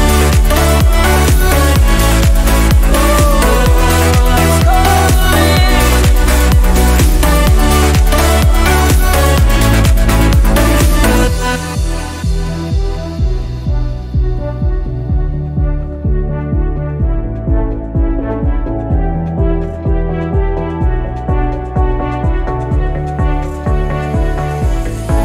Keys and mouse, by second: 12.0 BackSpace, 25.1 Down.